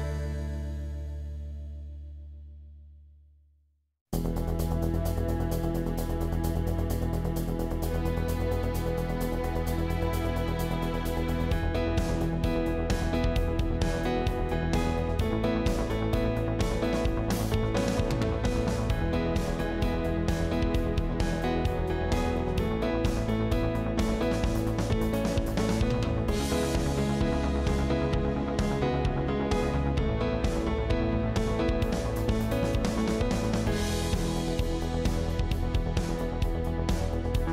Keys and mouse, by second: 0.0 KP_3, 1.6 shift+click, 3.5 e, 9.6 ctrl+z, 11.5 e, 14.8 alt+z, 16.1 click, 16.8 g, 19.6 click, 20.0 g, 20.7 click, 21.5 g, 23.9 click, 24.8 g, 28.2 click, 29.2 g, 31.3 alt+click, 34.0 e.